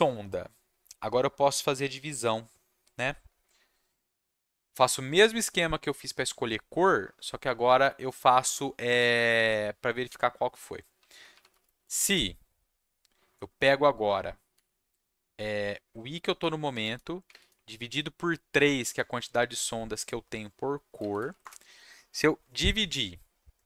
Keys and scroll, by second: 10.7-12.0 typing, 14.5 i, 16.2 space, 17.2 3, 17.3 space, 20.9 space, 21.2 shift+], 21.4 Return.